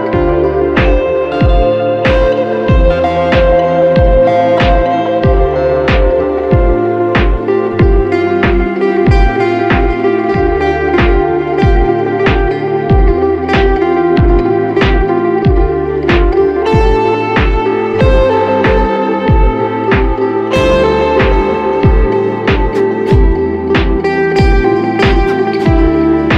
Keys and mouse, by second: 0.4-0.8 drag, 1.9-5.0 ctrl+middle drag, 5.0-7.7 drag, 7.7-10.6 ctrl+middle drag, 10.6-14.3 drag, 15.8-21.9 ctrl+middle drag, 21.9-25.6 drag.